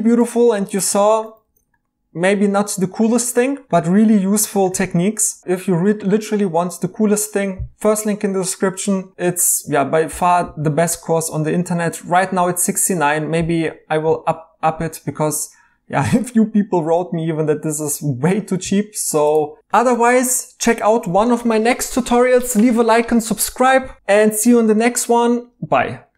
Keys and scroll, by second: 1.4 e, 19.9 e.